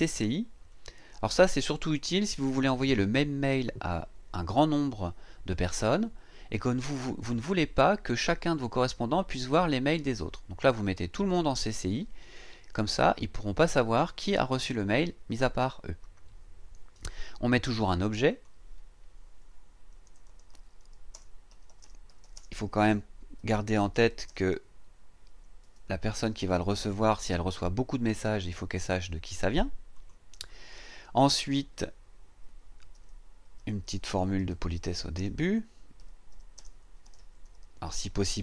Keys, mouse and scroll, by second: 0.7 click, 18.3 click, 19.7-27.2 typing, 29.9 click, 32.9-38.4 typing.